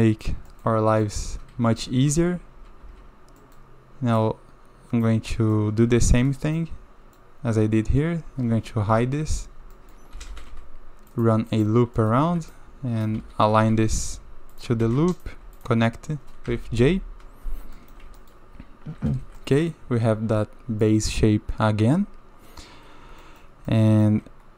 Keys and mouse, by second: 0.0 middle drag, 0.5 shift+middle drag, 1.0 click, 1.5 1, 1.9 click, 2.2 shift+z, 2.8 shift+z, 3.4 click, 4.3 click, 5.3 click, 5.8 Tab, 6.6-7.2 drag, 9.4 Tab, 9.7 drag, 10.1 a, 10.3 a, 10.5 ctrl+r, 12.0 click, 12.3 shift+z, 13.2 shift+z, 13.7 g, 14.8 a, 15.0 a, 16.5 j, 17.8 click, 18.2 shift+middle drag, 19.0 a, 19.1 a, 19.4 drag, 20.8-21.2 drag, 23.2 shift+middle drag, 23.7 middle click.